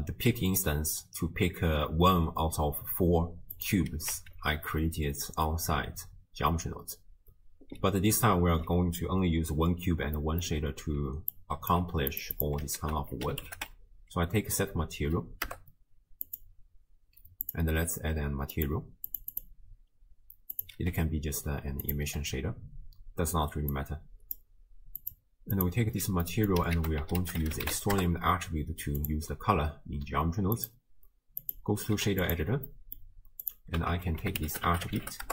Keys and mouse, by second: 3.6 click, 4.3 shift+a, 10.2 click, 10.2 middle click, 11.4-11.7 drag, 11.8 g, 12.4 click, 12.8 ctrl+a, 18.6 click, 19.1 click, 19.4 click, 20.6 click, 20.9 e, 21.9 click, 23.7 click, 25.2 click, 26.2 middle click, 26.8 ctrl+a, 30.6-31.5 drag, 32.1 q, 32.7 middle click, 33.5 click, 33.9 ctrl+a, 34.5 t.